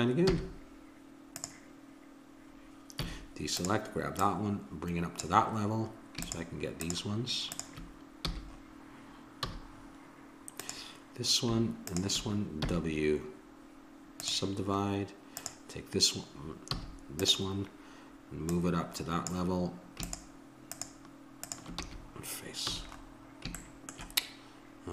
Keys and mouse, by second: 0.3 w, 3.0 a, 3.5-6.2 drag, 6.2-9.1 drag, 8.3 f, 9.5 a, 10.6-14.3 drag, 12.6 w, 15.4-22.9 drag, 16.8 a, 21.8 f, 22.6 a, 23.3 middle click.